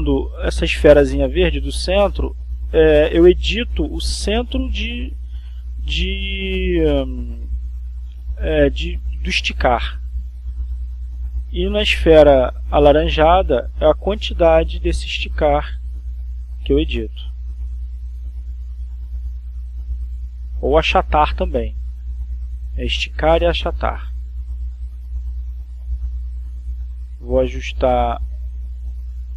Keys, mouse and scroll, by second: 2.3 click, 5.0 click, 6.6 click, 7.9-10.9 drag, 12.1 click, 13.9 click, 14.9-15.7 drag, 16.1 Right, 19.6 Down, 25.4 click, 26.3-28.6 drag.